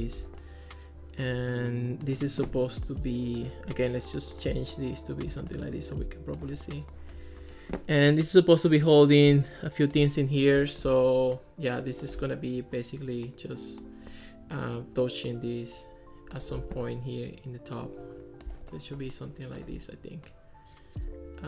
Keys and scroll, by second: 16.7 super+z.